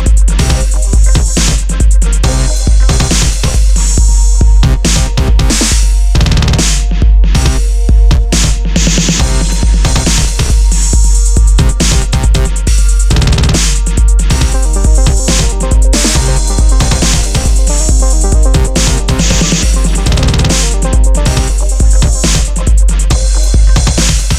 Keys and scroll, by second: 1.0 super+d, 1.0 super+-, 7.0 super+z, 10.0 super+-, 13.0 super+z, 14.8 super+z, 15.8 super++.